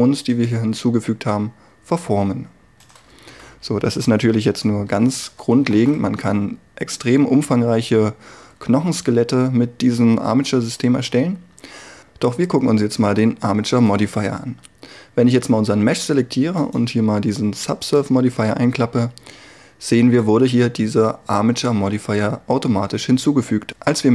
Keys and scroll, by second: 3.4 a, 4.9 alt+r.